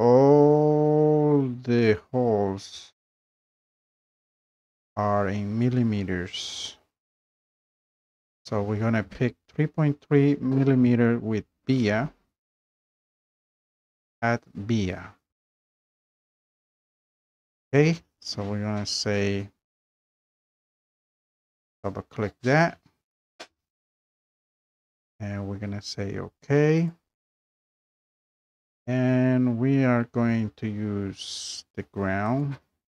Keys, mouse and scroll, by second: 15.2 click, 15.8-20.3 drag, 21.7 click, 26.9 click, 28.4 scroll up 1, 29.0 scroll up 2, 29.3 scroll down 3, 29.5 scroll up 2, 30.0 scroll down 1, 32.5 click, 32.8-32.9 scroll.